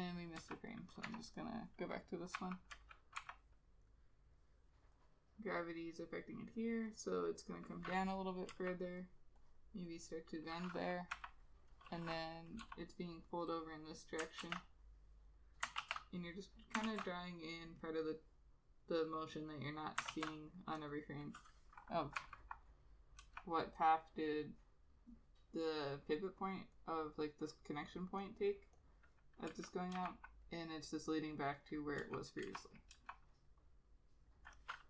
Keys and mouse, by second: 0.5 ], 1.2 Delete, 2.5 Delete, 2.8 [, 2.9 [, 3.3 ], 8.6 e, 9.5 double click, 11.3 ], 12.8 b, 14.6 ctrl+z, 15.9 ctrl+z, 17.0 ctrl+z, 20.2 ctrl+z, 22.3 [, 23.4 ], 28.6 double click, 29.6 [, 30.1 ], 32.1 [, 32.6 ], 33.1 ].